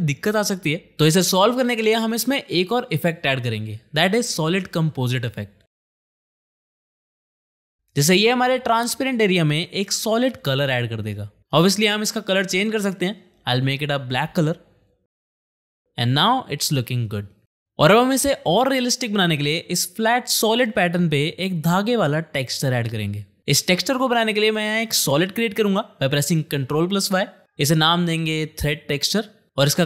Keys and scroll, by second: 4.6-5.8 typing, 6.3 ctrl+a, 8.3 space, 19.6 space, 20.9 shift+/, 26.8 ctrl+y.